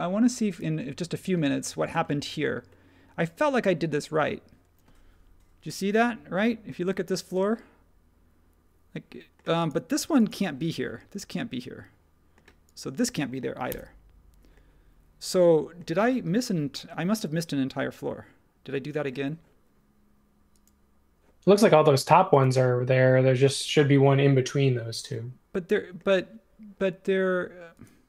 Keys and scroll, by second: 13.7 BackSpace.